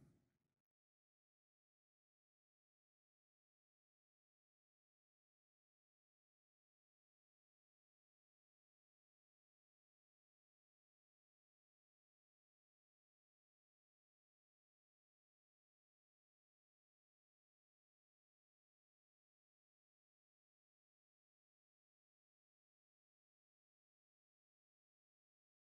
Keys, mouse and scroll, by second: 1.6 alt+click, 5.8 click, 7.0 click, 9.7 click, 11.2 alt+click, 15.0 click, 16.9 click, 18.9 click, 20.1 alt+click, 21.1 click, 21.1 alt+right click, 22.9 click, 24.6 click.